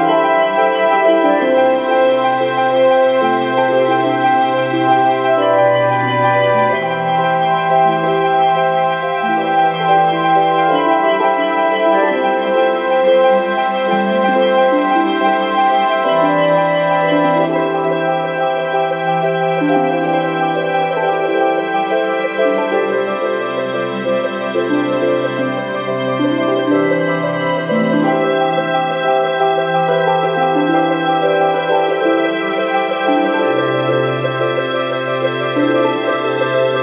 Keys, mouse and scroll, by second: 8.6 click, 11.2 click, 12.6 click, 14.3 click, 22.8 click, 24.3 scroll down 1, 24.9 scroll up 1, 25.7 click, 27.8 click, 31.5 click, 33.2 5, 33.8 0.